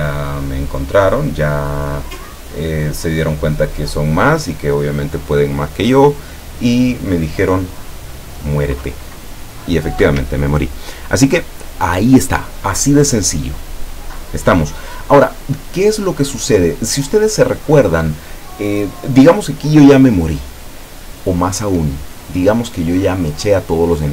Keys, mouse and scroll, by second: 10.2 Escape.